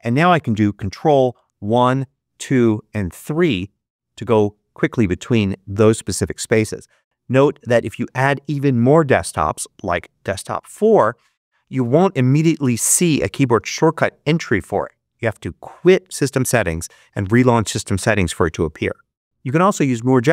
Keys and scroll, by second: 1.4 ctrl+1, 2.0 ctrl+2, 2.8 ctrl+3.